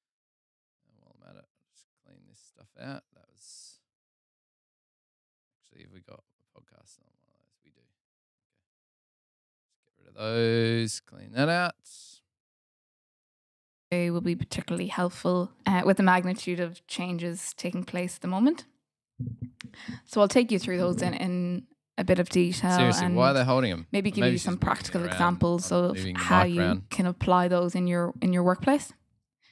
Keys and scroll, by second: 14.0 space, 14.1 super+], 14.2 super+], 14.4 super+], 15.8 super+], 16.3 super+], 16.9 super+[, 18.1 super+[, 23.6 Delete, 24.0 f, 26.6 Delete, 28.4 f, 29.3 g.